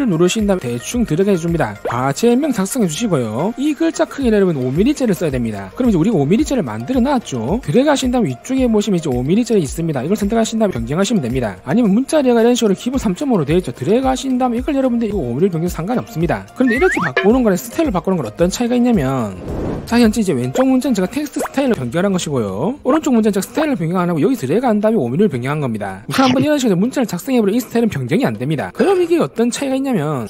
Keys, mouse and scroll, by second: 0.7 click, 2.0-3.4 typing, 7.7 click, 8.3 click, 8.9 click, 10.9 click, 14.4 click, 16.0 click.